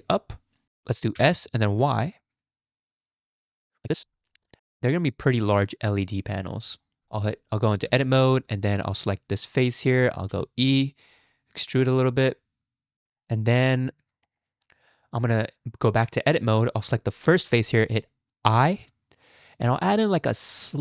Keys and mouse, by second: 0.6 ctrl+z, 0.6 s, 1.1 s, 4.6-6.6 middle drag, 6.9 shift+middle click, 7.2 middle click, 7.9 Tab, 8.2 middle click, 9.5 click, 10.3 e, 12.9 shift+middle click, 13.2 click, 13.9 Tab, 14.3 shift+click, 14.7-16.3 drag, 18.6 i.